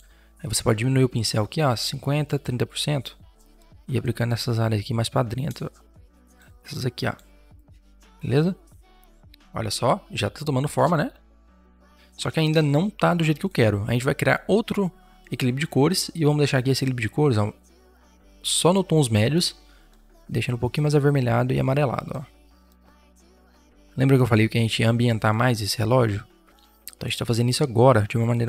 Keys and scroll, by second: 0.7 5, 9.1 ctrl+0, 12.3 v.